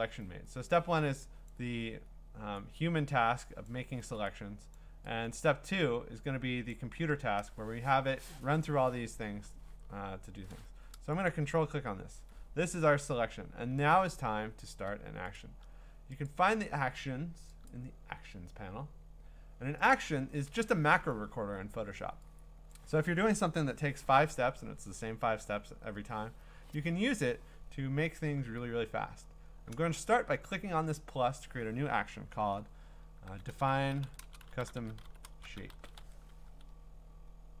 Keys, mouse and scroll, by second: 1.5 click, 3.6 click, 4.8 click, 7.2 Return, 11.3 ctrl+click, 12.3-15.2 ctrl+scroll, 15.4 click, 16.3 click, 17.7 click, 19.9 click, 22.7 click, 30.5 click, 33.0-36.5 typing, 33.3 click.